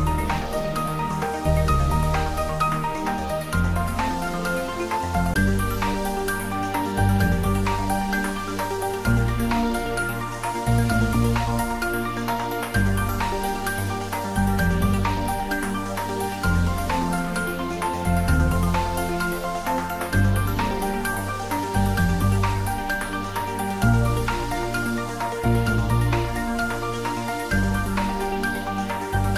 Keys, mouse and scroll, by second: 1.8-9.0 drag, 9.1-10.2 scroll up 1, 10.2 Tab, 11.4-12.7 scroll down 1, 12.7 click, 16.6 click, 19.4 click, 19.9 click, 21.4 Tab, 23.1 3, 23.9 click, 26.0-26.7 scroll down 1.